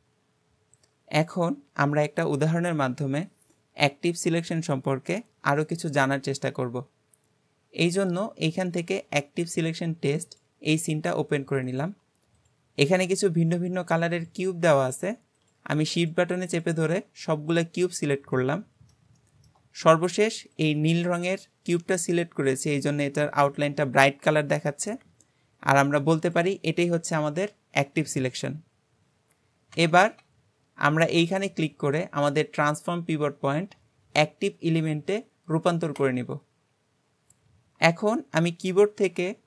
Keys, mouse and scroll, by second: 8.1-11.1 drag, 11.7 click, 12.4 shift+click, 12.9 shift+click, 13.6 shift+click, 14.2 shift+click, 14.8 shift+click, 15.4 shift+click, 16.0 click, 16.5 click, 17.3-30.0 middle drag, 30.1 Escape, 31.2-34.4 drag.